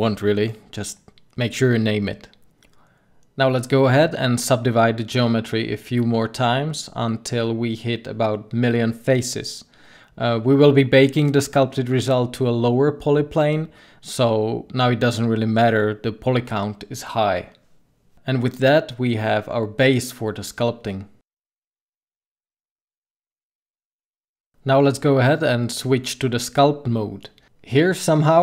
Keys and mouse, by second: 0.7-1.7 middle drag, 5.6 middle click, 11.3 middle click, 16.2-17.8 middle drag, 20.2-21.7 middle drag, 25.8 Tab.